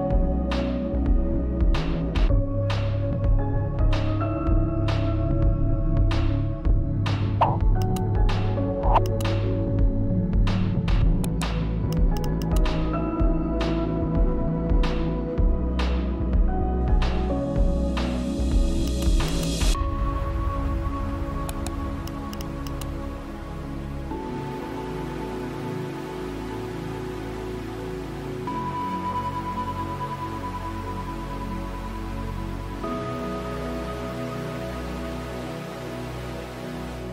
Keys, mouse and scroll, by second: 0.0-2.0 typing, 4.2-5.0 typing, 6.1-7.9 typing, 10.1-13.2 drag, 13.2 right click, 13.9 click, 15.0-19.3 typing, 20.6-23.8 drag, 23.8 right click, 24.4 click, 26.8-35.4 typing, 36.7-37.1 typing.